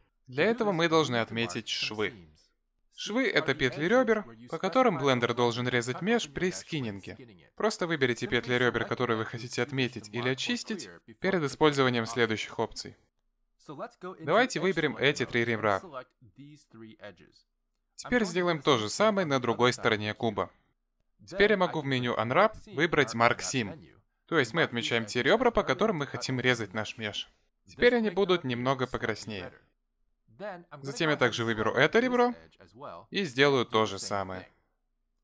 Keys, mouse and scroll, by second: 1.5 middle click, 5.9 middle click, 8.8 middle click, 13.5 click, 15.5 click, 16.5 shift+click, 17.7 middle click, 19.6 shift+click, 22.2 middle click, 23.9 click, 28.8 middle click, 32.7 click, 33.7 middle click, 34.9 click.